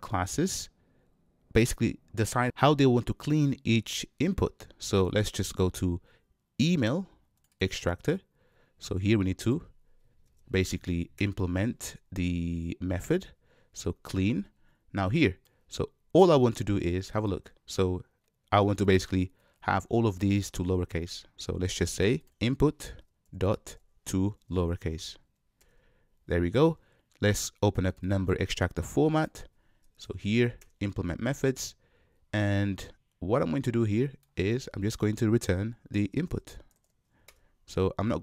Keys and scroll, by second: 10.3 alt+Return, 23.0 Return, 30.2 alt+Return, 37.2 Return.